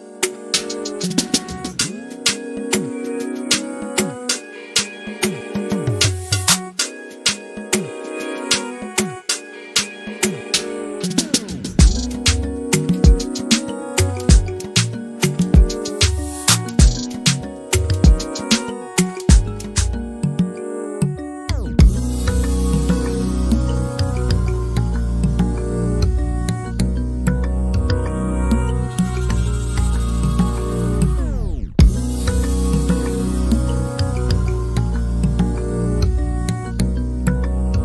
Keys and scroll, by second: 0.5 typing, 3.3-6.1 typing, 8.0-10.1 typing, 11.5-14.2 typing, 16.7-18.0 typing, 26.3 m, 27.2 space, 28.7 s, 30.1-30.6 typing, 32.1-33.2 typing, 35.9 Right, 36.1 Left.